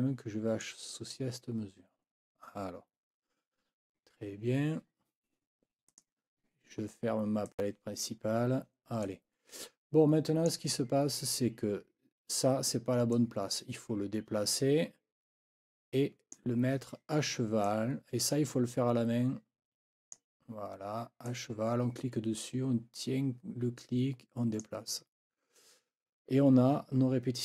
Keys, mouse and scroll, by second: 5.9 click, 7.5 click, 9.0-10.7 drag, 13.1-16.5 drag, 17.6-20.3 drag, 21.3-24.8 drag.